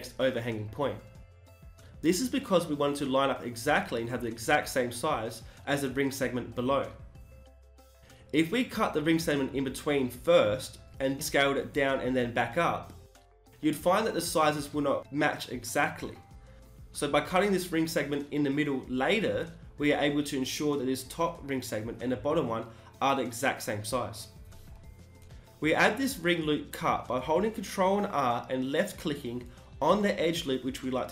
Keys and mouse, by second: 24.2 ctrl+r, 28.4 g, 30.7-31.1 drag.